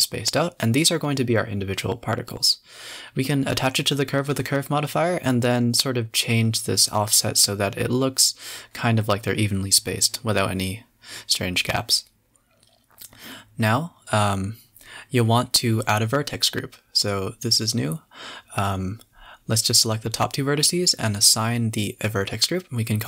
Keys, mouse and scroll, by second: 0.1-0.4 scroll down 4, 1.1-3.1 drag, 3.3 click, 4.3 scroll up 4, 6.2-8.7 drag, 9.0 click, 9.6 click, 9.9-11.5 drag, 11.5 scroll down 2, 11.7-13.5 typing, 13.1 click, 14.6 scroll up 2, 14.8 a, 14.9 a, 15.2 Tab, 15.8 scroll up 12, 16.0 a, 16.2 a, 16.2 b, 16.8-17.3 scroll down 10, 17.9 click, 19.3 click, 20.1 click, 20.9-22.8 drag, 22.8 Tab, 22.9 scroll down 6.